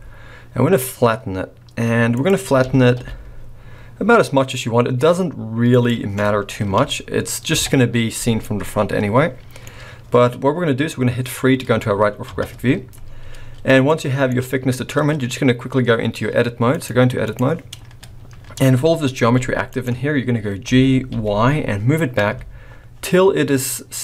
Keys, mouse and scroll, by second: 2.6 s, 6.6 KP_1, 7.5 KP_3, 8.3 middle click, 12.2 KP_3, 13.0-13.7 scroll up 6, 13.9 shift+middle click, 16.7 click, 17.8-18.5 scroll up 1, 18.5-18.9 scroll down 2, 19.2 g, 20.0-20.6 scroll up 2, 20.6 scroll up 1, 20.6 g.